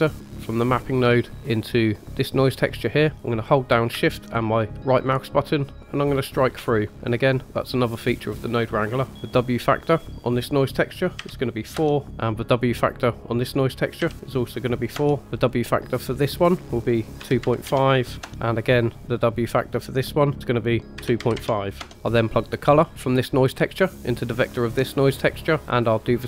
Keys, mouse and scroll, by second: 0.2-2.5 drag, 5.0-6.4 shift+right drag, 7.5-8.0 drag, 9.1-9.8 scroll up 1, 9.8-11.7 drag, 12.7-14.9 drag, 15.3-18.2 drag, 19.1 click, 23.0-24.6 drag, 25.5 middle click.